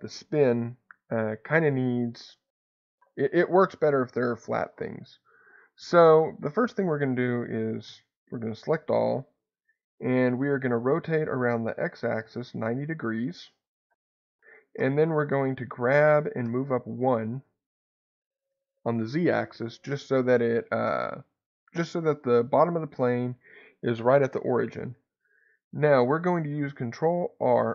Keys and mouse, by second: 5.5 click, 10.8 r, 10.9 x, 12.0 9, 12.1 0, 13.8 click, 14.8 g, 15.2 z, 16.4 1, 17.1 click, 20.8 middle click, 27.1 shift+r.